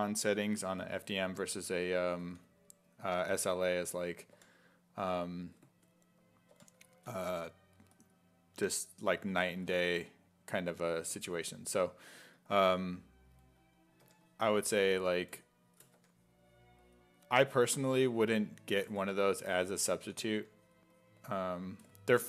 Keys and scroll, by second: 1.5 s, 2.2 s, 4.4 5, 6.3-7.7 typing, 9.6 s, 9.9 1, 14.0 1, 16.0 1, 17.4-18.4 typing, 20.0 s, 20.4 1.